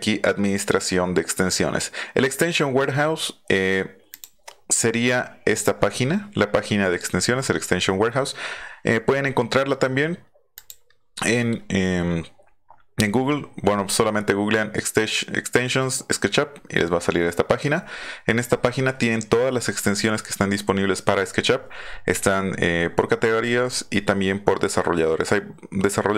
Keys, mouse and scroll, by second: 4.1 click, 5.6 click, 10.5 click, 17.9-18.3 scroll down 1, 18.4 scroll up 1, 21.8 scroll down 1, 23.5 scroll down 1, 23.6-24.3 scroll up 2.